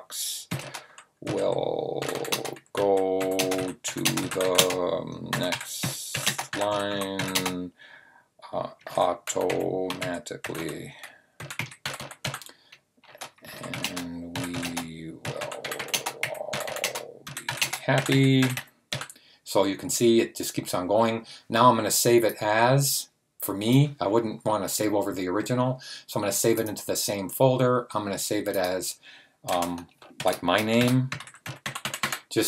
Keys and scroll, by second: 0.0-19.3 typing, 30.0-32.4 typing.